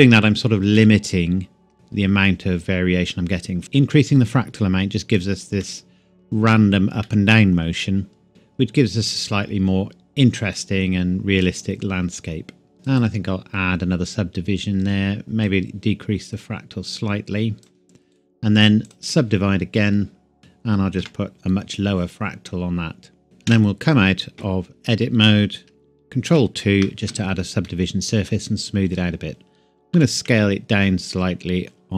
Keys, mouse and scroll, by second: 0.8 middle click, 3.6 click, 5.6 middle click, 8.3-8.7 scroll down 1, 8.7 scroll up 1, 10.6 click, 12.9 click, 15.4 click, 18.2 right click, 18.8 click, 20.4 KP_2, 21.0 KP_Enter, 23.2 middle click, 23.5 Tab, 26.3 ctrl+2, 27.7 middle click, 30.0 s, 30.3 z.